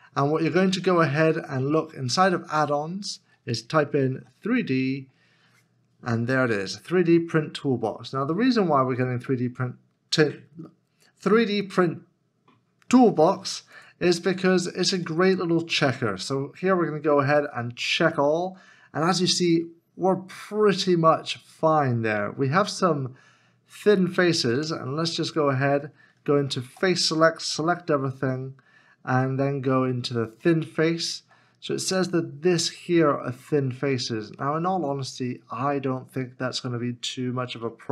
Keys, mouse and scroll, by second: 4.1 middle click, 4.4 d, 14.2-15.6 scroll up 1, 24.6 Tab, 26.7 3, 27.5 a, 31.3 a, 31.4 middle click, 33.8-34.3 scroll up 1, 34.4 shift+middle click.